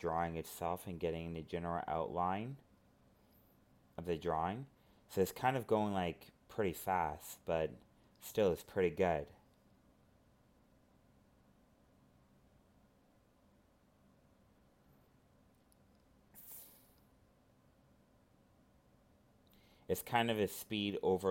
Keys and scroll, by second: 2.4 ctrl+z, 3.4 alt+space, 6.4 ctrl+z, 8.7 ctrl+z, 8.8 alt+space, 11.6 ctrl+z, 12.6 alt+space, 13.1 ctrl+z, 14.7 alt+space, 18.2 ctrl+z, 19.8 alt+space.